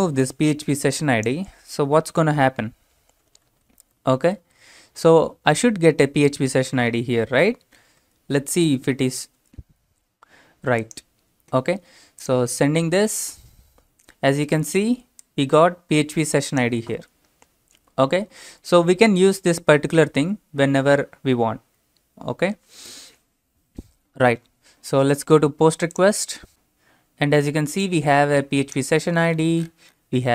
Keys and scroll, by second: 2.9-5.4 typing.